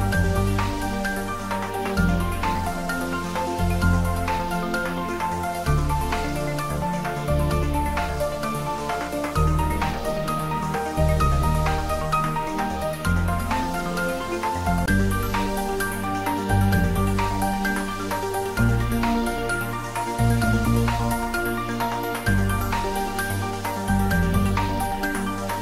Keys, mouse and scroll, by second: 1.1 click, 6.0 Tab, 6.5-7.8 scroll down 1, 7.8-9.1 middle drag, 11.3-11.8 scroll up 1, 11.8-13.4 middle drag, 15.3-16.8 drag, 22.6-23.1 scroll down 1, 23.3-23.8 middle drag, 24.9 scroll up 1, 25.3 middle click.